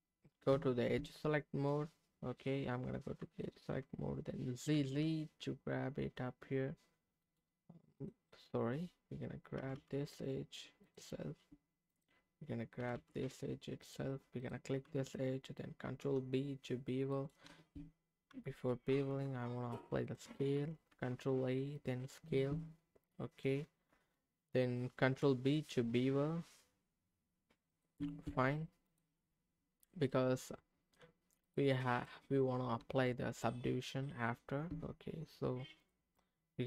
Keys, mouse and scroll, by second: 0.5 Tab, 0.9 Tab, 3.3 alt+click, 4.7 g, 4.9 g, 7.2 right click, 8.0 click, 9.5 g, 9.8 g, 10.8 click, 11.9 click, 12.8 g, 13.0 g, 13.8 click, 15.8 ctrl+b, 17.1 right click, 18.9 ctrl+a, 20.0 click, 20.9 ctrl+a, 22.3 Tab, 25.0 ctrl+b, 26.8-27.7 scroll up 2, 27.7 click, 28.0 Tab, 28.8 click, 29.2 middle click, 30.0 middle click, 31.4 click, 31.9 click, 32.8 Tab, 35.8 click, 36.1 middle click.